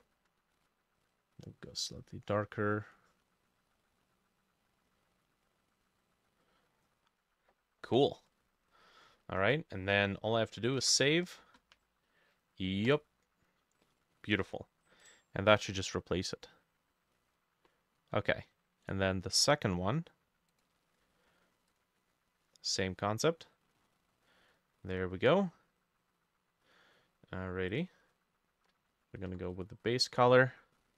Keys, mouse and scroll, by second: 2.1-8.9 drag, 10.8 ctrl+s, 17.2 middle click, 18.9 right click, 23.8 middle click, 24.0 scroll down 1, 24.3 middle click.